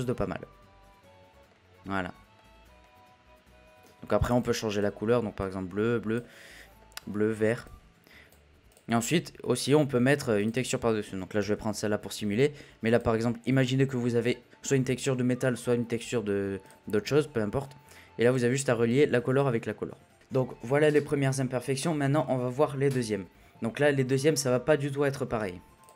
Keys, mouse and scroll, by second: 1.3 scroll down 3, 1.5-1.9 middle drag, 1.9-2.3 scroll up 2, 2.3-4.4 middle drag, 4.7 click, 6.7 middle click, 7.0-8.3 scroll up 1, 8.3-8.7 scroll up 1, 8.7 drag, 9.0 click, 16.6 click, 20.1 Delete.